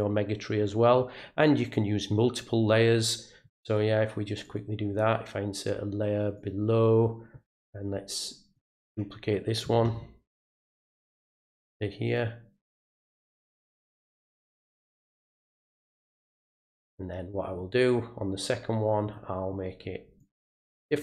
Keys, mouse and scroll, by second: 4.4 right click, 6.3 click, 8.5 click, 10.3 click, 12.0 click, 13.7-15.5 drag, 16.6 click, 19.0 right click, 20.2 click.